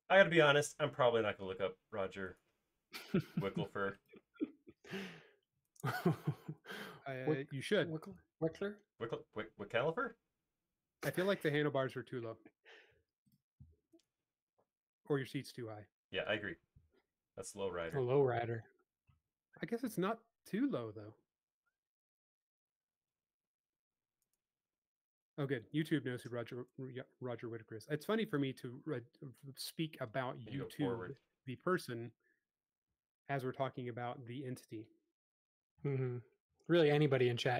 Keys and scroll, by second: 6.5 space, 20.0 m, 24.9 space, 26.7 BackSpace, 31.1 m, 33.0 typing, 34.2 typing.